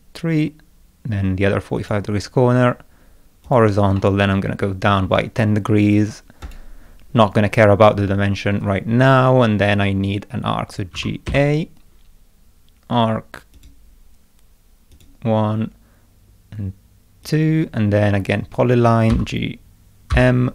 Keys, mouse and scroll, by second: 1.8 click, 3.5 click, 4.0 middle click, 6.4 click, 10.9 g, 11.3 a, 13.6 click, 14.9 click, 17.3 click, 19.1 g, 20.1 m.